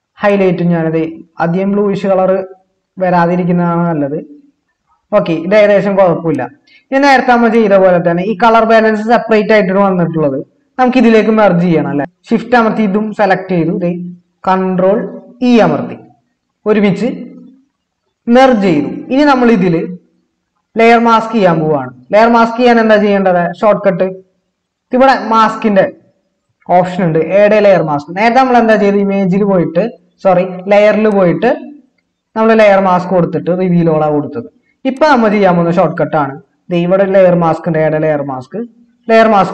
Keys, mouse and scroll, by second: 15.4 ctrl+e.